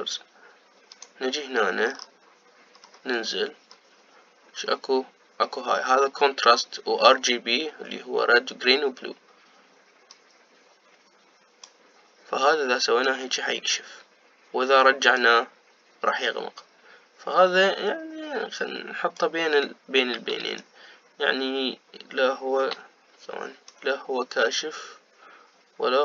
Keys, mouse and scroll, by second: 0.8-2.2 scroll down 2, 2.2 click, 3.0-3.9 scroll down 5, 3.9-5.0 scroll down 5, 5.0-5.5 scroll down 1, 11.3-26.0 drag.